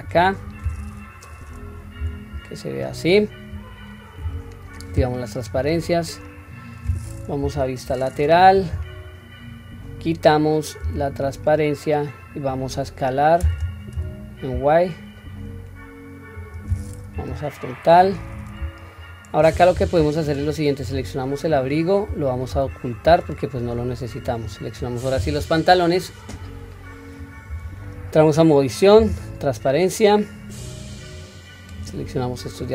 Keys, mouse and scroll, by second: 4.7 click, 7.4 KP_3, 13.4 s, 17.1 KP_1, 19.0-19.7 scroll down 1, 19.7 Tab, 20.2 click, 20.7 click, 21.6-22.5 scroll down 2, 22.5 h, 23.2 scroll up 1, 23.9-24.2 scroll up 2, 24.2 click, 27.5 Tab, 29.0 q, 31.1-31.7 drag, 32.6-32.7 drag.